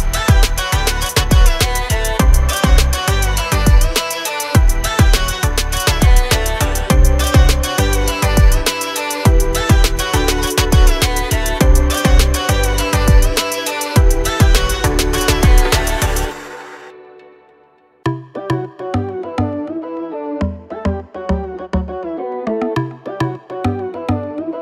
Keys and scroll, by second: 0.2 Up, 1.4 Up, 1.9-6.2 typing, 2.2 Return, 3.7 Return, 5.9 Return, 9.7 r, 11.6 space, 13.8 m, 14.2 Up, 15.2 Up, 15.5-20.6 typing, 22.1 2, 22.5 0, 22.7 Return, 23.4 space, 24.4 m.